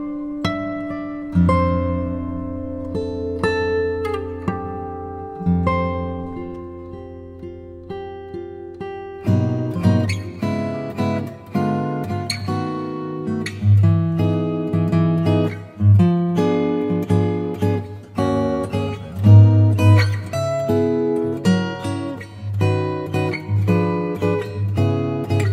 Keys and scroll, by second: 7.9 l, 10.3 z, 10.7 space, 12.5 ], 13.4 ], 15.5 3, 23.3 space, 24.4 space.